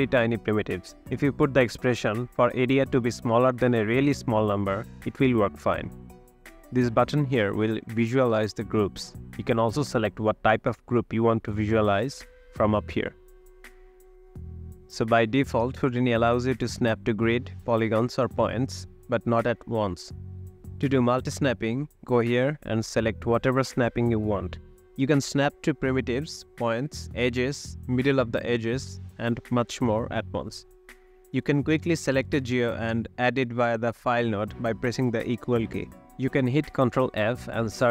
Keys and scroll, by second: 0.3 Tab, 0.3-1.4 typing, 12.3 space, 14.9 space, 15.4 space, 18.7 space, 32.6 =, 34.5 =, 37.0 ctrl+f.